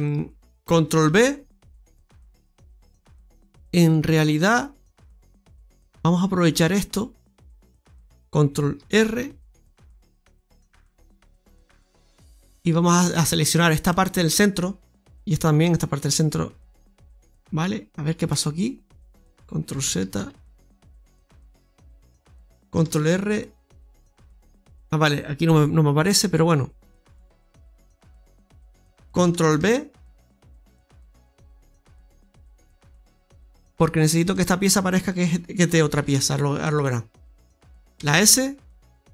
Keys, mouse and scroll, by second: 0.9 ctrl+b, 3.0 scroll down 1, 3.4 middle click, 3.6-4.7 scroll up 1, 9.1 ctrl+r, 12.0 right click, 12.3 alt+shift+right click, 13.8 middle click, 16.5 alt+shift+right click, 17.7-18.2 scroll up 2, 18.2 middle click, 19.8 ctrl+z, 20.1 ctrl+z, 20.4 ctrl+z, 20.6 ctrl+z, 20.8 ctrl+z, 21.0 ctrl+z, 22.9 ctrl+r, 26.9 middle click, 29.4 ctrl+b, 33.6 right click, 34.1 alt+shift+right click, 35.9 shift+s, 37.8 ctrl+z, 37.8 e, 38.4 s.